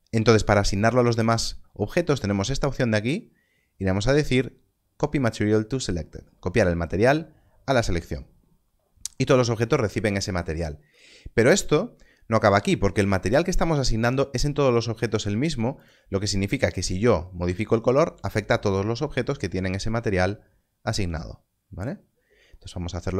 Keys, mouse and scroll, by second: 6.8 click, 15.7 click.